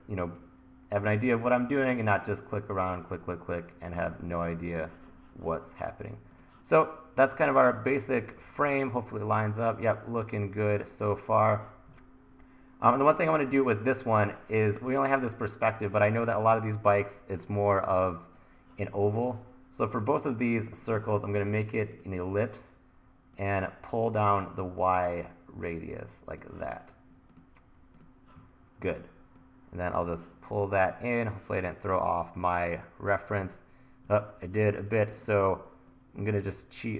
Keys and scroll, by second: 28.4 e, 34.1 1.